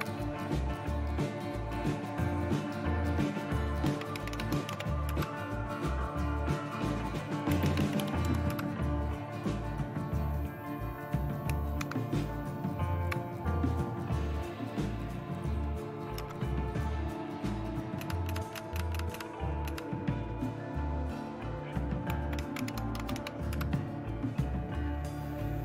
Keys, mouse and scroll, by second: 3.6-5.2 typing, 7.3-8.5 typing, 11.8 super+Left, 16.2 Up, 18.0-19.6 typing, 21.9-23.7 typing.